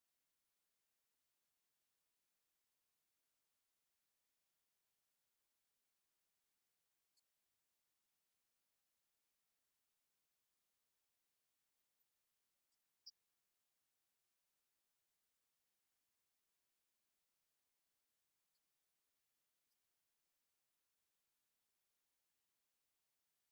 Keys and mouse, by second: 8.7 click, 10.3 click, 11.0 click, 19.0 click, 23.3-23.5 drag.